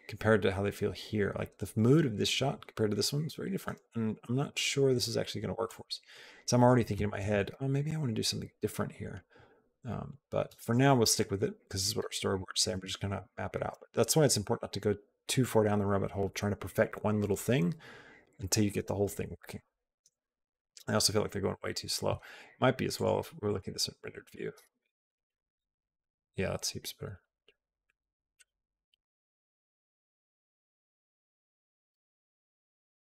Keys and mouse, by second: 4.7 click, 5.6-6.5 drag, 7.0 space, 10.4 click, 10.4 space, 11.0 click, 11.8 space, 20.1 click, 22.7 click, 22.7 space, 23.2 click, 24.1 click, 32.0 space, 32.6-33.1 drag.